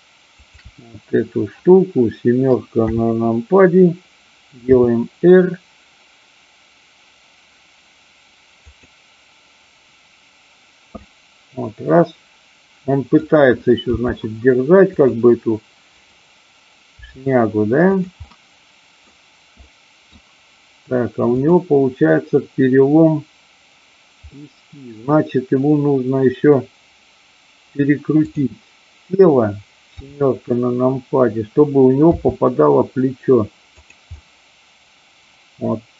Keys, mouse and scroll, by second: 0.4-1.4 shift+drag, 2.8 KP_7, 4.8 r, 8.5 click, 11.0-13.1 middle drag, 13.9 g, 15.0 click, 16.0 click, 17.0 g, 18.0 click, 18.2-19.0 middle drag, 19.6 middle click, 21.2-22.2 drag, 24.2-24.8 middle drag, 28.1 click, 29.9 KP_7, 32.1 r, 33.8 click, 34.1-35.9 middle drag.